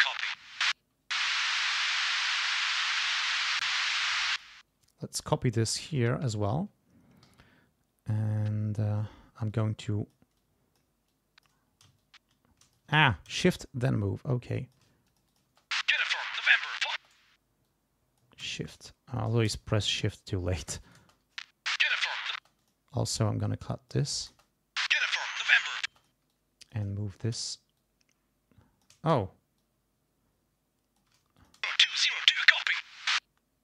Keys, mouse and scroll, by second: 1.2 space, 2.4 r, 2.6 click, 4.0 ctrl+c, 4.3 ctrl+click, 5.7 ctrl+v, 7.3 g, 7.5-7.8 ctrl+scroll up 2, 7.9 ctrl+scroll down 2, 9.0 ctrl+scroll down 2, 9.5 ctrl+click, 10.4 click, 11.1 click, 12.0 shift+click, 13.4 ctrl+shift+z, 13.6-14.9 shift+drag, 15.1 shift+click, 15.5 shift+space, 16.9 space, 17.7 click, 18.8 shift+click, 19.8 shift+click, 20.8 shift+click, 21.0 shift+space, 22.3 space, 22.6 click, 23.2 click, 24.2 click, 24.3 space, 25.9 space, 26.0 click, 26.3 click, 27.8-29.0 shift+drag, 29.6-31.2 shift+drag, 31.4 shift+click, 31.6 shift+space, 31.9 shift+click.